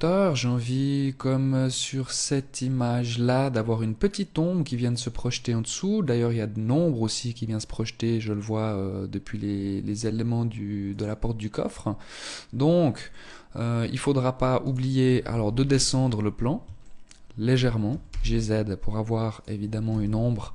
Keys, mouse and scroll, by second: 11.7-12.2 scroll down 1, 12.2 middle click, 13.7 right click, 14.5 KP_1, 15.2-15.7 scroll down 5, 15.9 shift+middle click, 16.9 g, 19.0 KP_0.